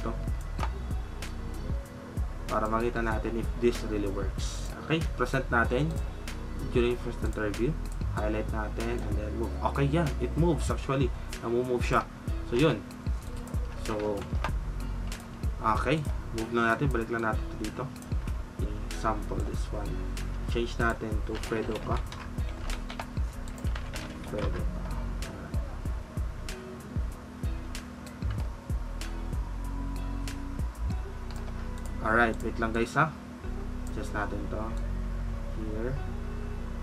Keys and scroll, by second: 13.9 ctrl+z.